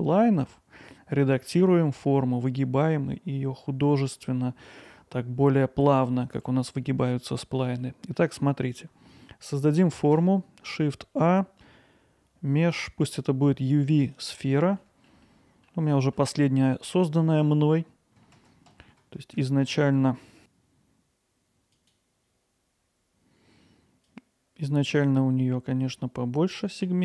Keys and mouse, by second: 6.4-7.1 middle drag, 7.8-8.1 middle drag, 14.8 middle drag, 15.2-15.7 alt+middle drag, 16.0 ctrl+alt+middle click, 24.1-26.6 drag.